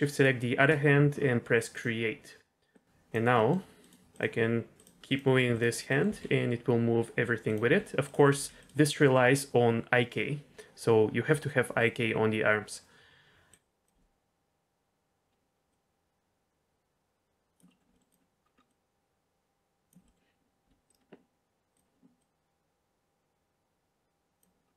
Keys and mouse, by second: 1.7 click, 2.7 click, 3.3 middle drag, 3.8 click, 4.1 click, 5.0 click, 5.8 middle click, 6.0 g, 7.6 r, 8.3 g, 8.5 click, 13.5-13.8 drag, 15.7-17.6 drag, 17.6 middle click, 17.9 middle click, 18.7 click, 20.0 middle click, 20.6 r, 22.2-24.4 drag.